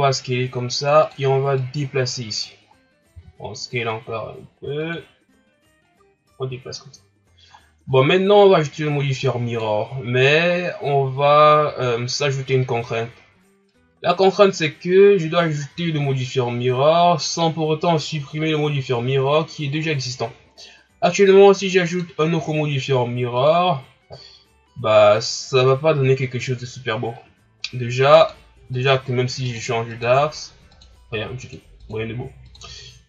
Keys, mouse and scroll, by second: 1.5-2.6 drag, 2.6 scroll up 2, 3.1 s, 5.9-7.5 drag, 7.5 scroll up 1, 8.1-9.2 ctrl+scroll up 2, 9.2-10.0 drag, 10.0 ctrl+scroll down 2, 10.6 scroll down 5, 12.9 scroll up 3, 13.7-14.9 drag, 14.9 scroll down 2, 15.6 ctrl+scroll up 1, 23.5 click, 28.2 click, 28.7 click, 29.5 click, 29.9 click, 30.7 click, 31.4-31.9 drag, 32.4 click.